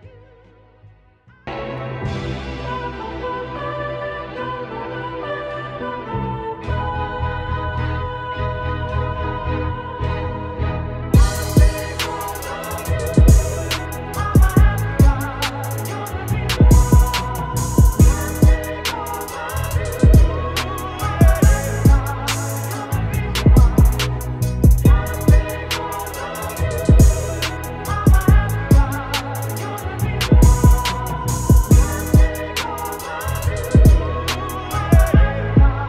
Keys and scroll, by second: 13.9 b, 20.4 [, 29.1 ctrl+t, 30.9 ctrl+shift+', 31.4 Up.